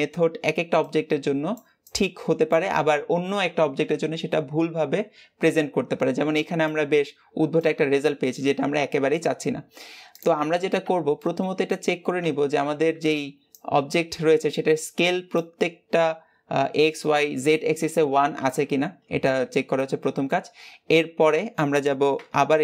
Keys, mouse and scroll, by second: 10.1 click, 10.7 Tab, 11.0-19.2 middle drag, 19.2 scroll down 3, 19.6 middle click, 20.3-21.1 scroll up 2, 21.1 middle click, 22.0 Tab.